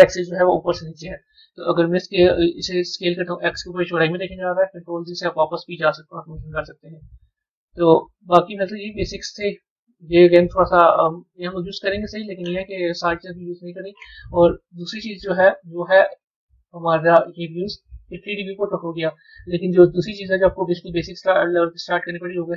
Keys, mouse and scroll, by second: 0.1 KP_1, 3.0-4.5 drag, 4.5 ctrl+z, 8.4 click, 9.2 click, 15.1-20.2 drag.